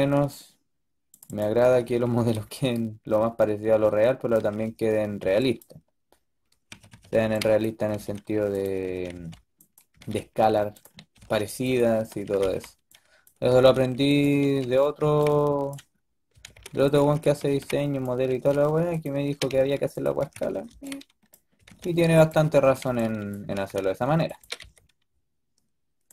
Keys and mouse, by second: 1.5 a, 1.7 a, 1.9 a, 2.1 b, 2.6-4.3 drag, 4.3 a, 4.5 a, 5.1 b, 6.6-9.8 typing, 11.1-14.9 typing, 16.2-18.2 typing, 19.2-24.3 typing.